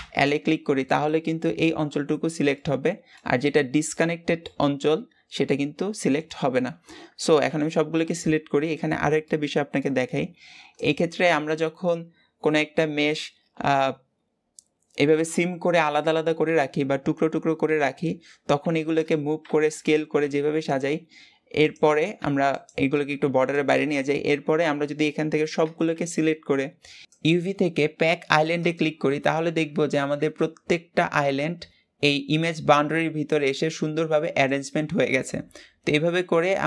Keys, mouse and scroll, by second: 0.7-7.3 middle drag, 7.3 a, 8.3 a, 9.4 right click, 10.2-10.7 right drag, 10.7 Left, 12.1 right click, 18.5 g, 19.4 s, 20.1 g, 21.5 Left, 22.1 g, 23.1 g, 25.5 a, 28.6-36.2 drag, 36.2 g.